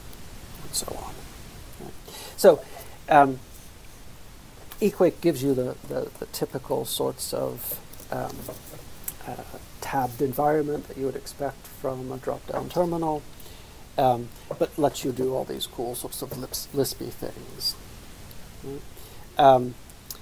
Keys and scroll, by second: 5.6 ctrl+{, 5.9 ctrl+{, 6.2 ctrl+{, 6.5 ctrl+{, 17.3 F12, 19.1 alt+x, 19.3-20.2 typing.